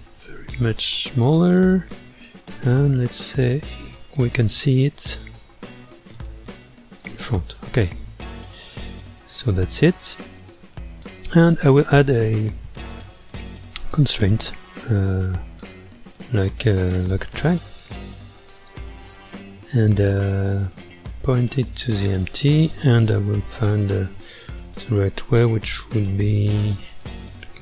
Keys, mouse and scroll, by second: 0.2-3.4 drag, 3.4 click, 5.1-7.0 drag, 8.1 scroll up 1, 8.1-11.0 middle drag, 11.0 click, 12.8 click, 14.0-17.2 drag, 18.5 click, 27.0 click.